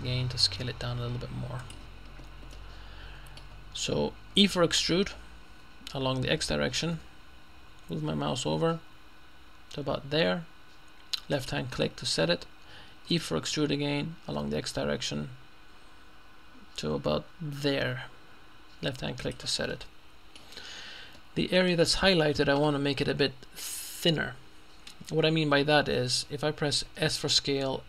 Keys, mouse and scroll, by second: 1.7 click, 2.6 middle click, 3.3-4.9 middle drag, 5.5 e, 7.0 x, 11.4 click, 13.1 e, 14.4 x, 19.3 click, 20.8-21.2 scroll up 1, 21.2 middle click, 22.1-22.7 scroll up 1, 27.1 s.